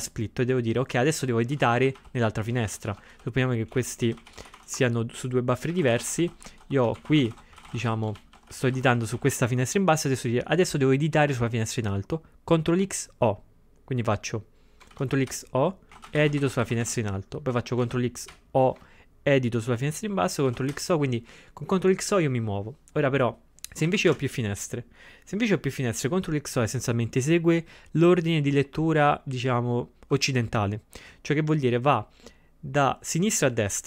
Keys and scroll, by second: 1.3-2.7 typing, 2.6 ctrl+x, 4.4-6.9 typing, 14.9 ctrl+x, 15.3-16.4 typing, 17.5-18.3 typing, 20.5 ctrl+x, 20.7 o, 23.9 ctrl+x, 24.2 3.